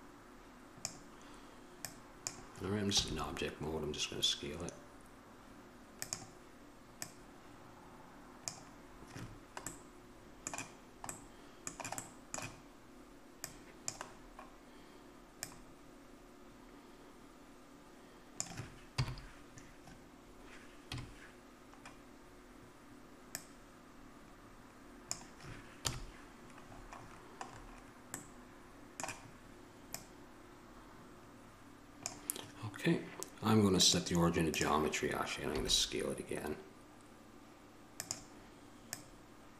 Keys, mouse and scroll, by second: 9.9-13.5 middle drag, 15.6-18.6 drag, 19.2 KP_7, 21.0 KP_Decimal, 26.0 KP_1, 34.8-37.5 drag, 39.3-39.5 drag.